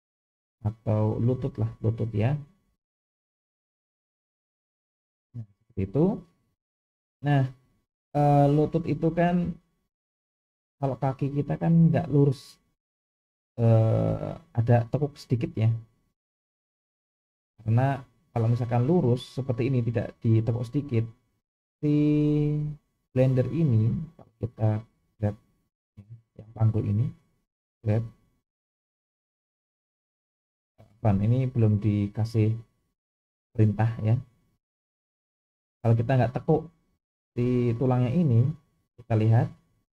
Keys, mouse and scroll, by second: 1.4 BackSpace, 1.8 BackSpace, 22.7-23.5 drag, 24.5 click, 25.3-26.1 middle drag, 27.5 g, 33.1 click, 35.3 click, 36.6 middle click.